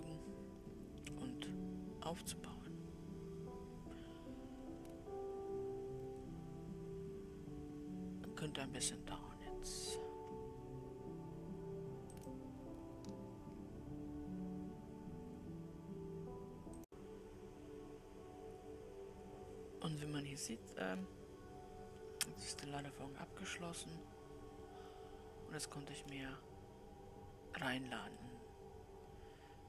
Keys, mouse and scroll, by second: 21.1-24.3 middle drag, 27.8-28.6 scroll up 2, 28.6-29.6 middle drag.